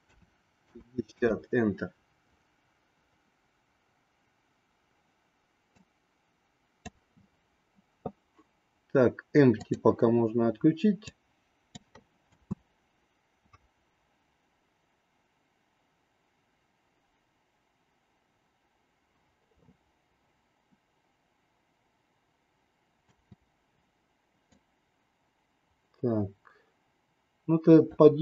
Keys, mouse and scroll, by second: 5.8-7.1 drag, 9.6 click, 11.1 click, 12.2 space, 23.1 space, 24.5-28.0 drag.